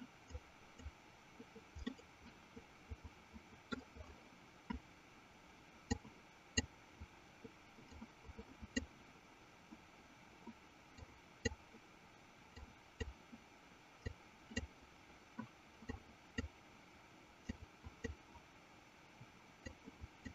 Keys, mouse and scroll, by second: 0.6 click, 2.1-3.9 middle drag, 6.2 click, 8.4 click, 11.2 click, 13.1 click, 14.5 click, 16.3 click, 18.1 click, 20.1 click.